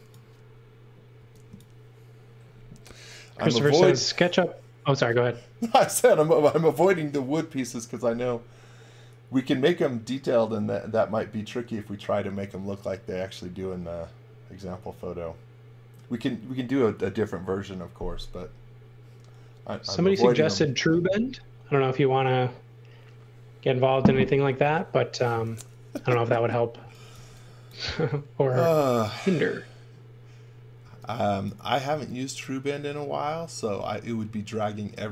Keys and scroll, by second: 1.1 x, 26.8 x, 27.1 v, 27.9 space, 30.8 x, 31.9 x.